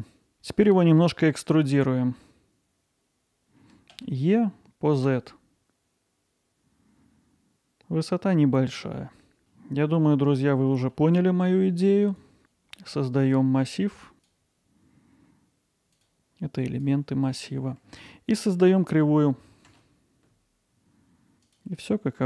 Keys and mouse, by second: 9.4 alt+Tab, 10.4-10.7 middle drag, 10.9 alt+middle click, 12.1 click, 13.2-14.2 drag, 14.6 click, 15.0 click, 15.9 click, 17.1 middle drag, 17.9 alt+middle click, 18.6 middle drag, 19.7 shift+a, 20.6 middle drag.